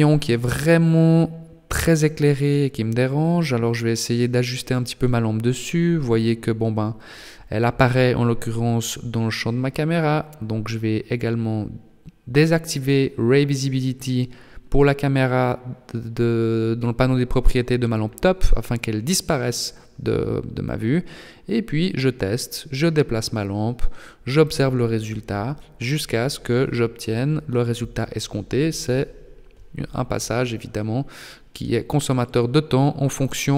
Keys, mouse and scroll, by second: 1.7 g, 10.3 click, 13.0 click, 16.6 g, 19.5 r, 21.4 g, 26.8 r, 28.1 r, 32.8 r.